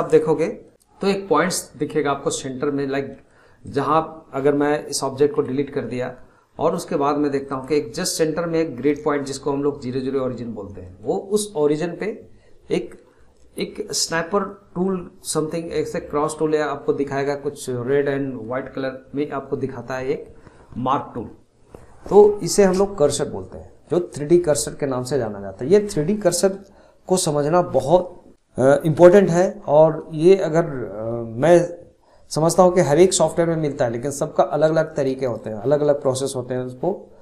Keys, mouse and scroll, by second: 0.4-1.9 middle drag, 2.7 scroll down 1, 3.0-3.6 middle drag, 3.6 click, 5.3 Delete, 6.0 scroll up 1, 6.6-7.4 scroll up 6, 7.4 click, 8.0-9.4 middle drag, 9.4-10.8 scroll down 2, 10.8-13.8 middle drag, 14.8-17.9 middle drag, 18.4 scroll up 7.